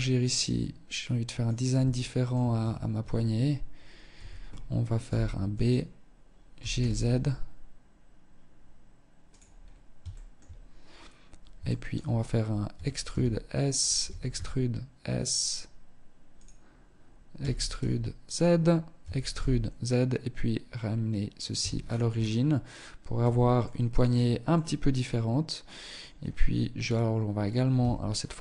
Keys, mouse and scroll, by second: 1.2 shift+middle click, 1.8 Tab, 2.2 Tab, 2.7 scroll up 1, 3.3 a, 4.3 b, 5.7 g, 8.8-9.3 scroll up 3, 9.3 shift+middle click, 10.9 shift+middle click, 11.9 e, 13.3 e, 16.5 e, 17.5 click, 18.2 e, 20.8 Tab, 21.0-21.7 scroll down 8, 22.4 z, 22.8 middle click, 23.2-23.7 scroll down 1, 23.7 middle click, 23.7 scroll down 1, 26.9 KP_3, 28.1 z, 28.3-28.4 scroll up 7.